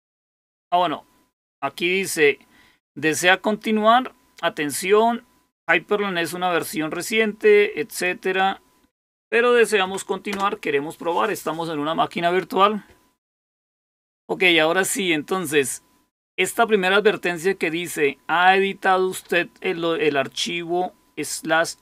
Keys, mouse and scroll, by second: 7.8 click, 10.2 Return.